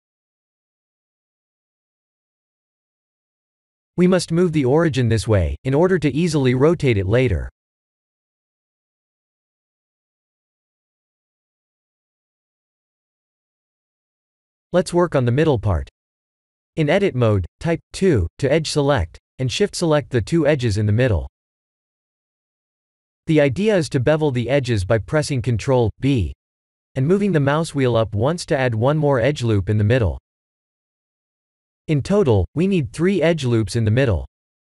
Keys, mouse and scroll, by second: 3.3 KP_1, 4.0 KP_3, 4.6 r, 8.5-11.0 middle drag, 11.3 ctrl+z, 11.9-12.4 middle drag, 12.4 Tab, 12.7 middle click, 13.3-14.6 scroll up 2, 14.6 2, 15.6 click, 16.4 shift+click, 17.4 middle click, 18.5 ctrl+b, 24.6-25.0 scroll up 2, 25.2 shift+middle click, 25.7 shift+z, 26.0-26.6 scroll up 3, 26.6-27.7 middle drag, 27.8 shift+middle click, 29.0 shift+middle click, 29.7-31.1 scroll up 2, 31.1 middle click, 32.3 ctrl+r.